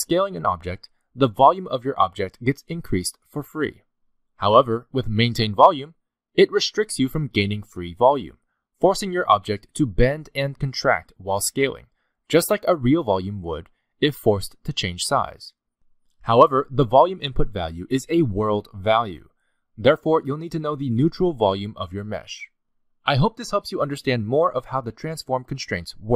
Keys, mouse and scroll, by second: 1.4 s, 6.2 click, 7.9 s, 11.8 s, 13.7 s, 21.4 click, 23.7-24.0 scroll down 4, 24.0 middle click, 24.4 s.